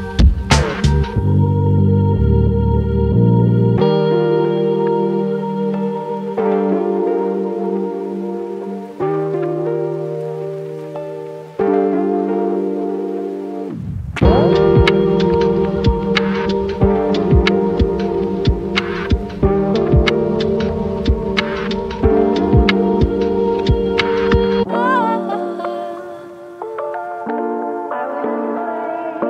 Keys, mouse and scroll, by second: 14.7-15.1 scroll down 1, 16.9 right click, 23.9-29.2 drag.